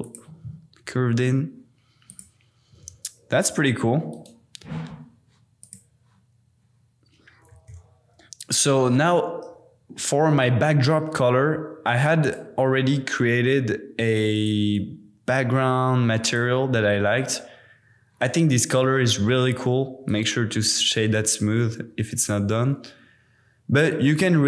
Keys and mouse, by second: 0.0 shift+click, 2.1 click, 2.7 g, 2.8 z, 4.1 click, 5.6 click, 8.2 super+s, 12.2 click, 14.5-16.4 drag, 20.0-21.0 drag.